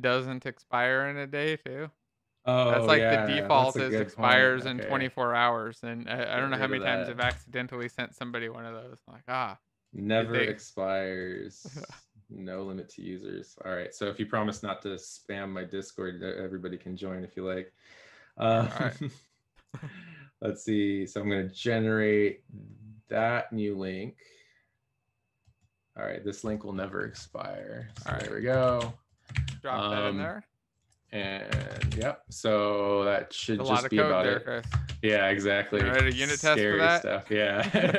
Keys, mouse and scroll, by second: 28.6 alt+shift+f, 29.8 ctrl+s, 31.5 shift+Delete, 31.9 ctrl+s, 31.9 Down.